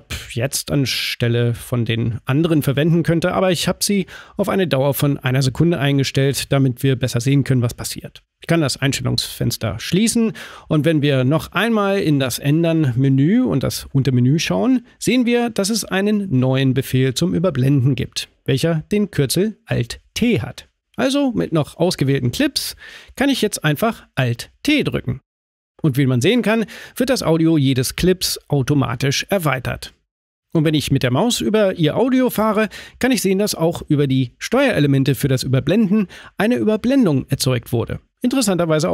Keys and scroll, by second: 23.5 alt+t.